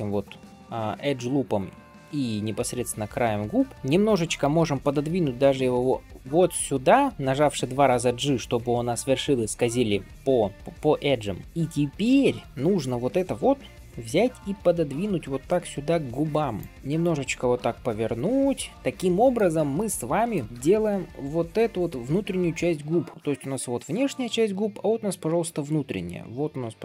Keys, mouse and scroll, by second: 3.2 shift+middle click, 3.7 g, 11.4 click, 18.7 middle click, 19.6 middle click, 20.4 shift+middle click, 20.5 d, 20.6-22.7 drag, 22.6-26.4 d, 26.4-26.8 drag.